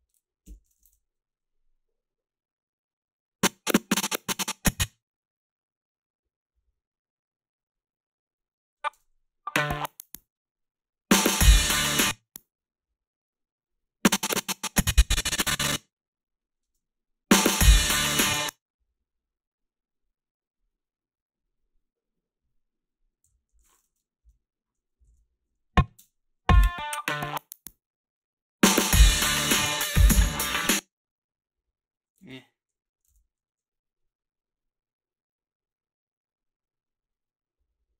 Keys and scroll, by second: 0.3-1.2 typing, 9.0 space, 11.8 space, 16.6 space, 18.2 space, 23.3 g, 24.2 Delete, 25.1 ctrl+b, 25.9 space, 30.5 space, 32.2 ctrl+b.